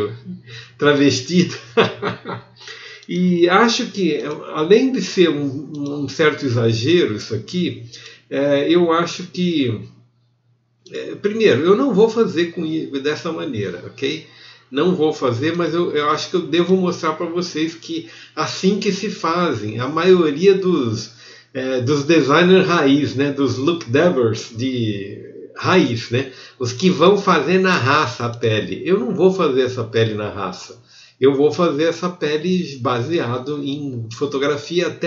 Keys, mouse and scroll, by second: 6.9 click, 6.9 a, 11.0-13.4 middle drag, 13.4 f, 15.8 x.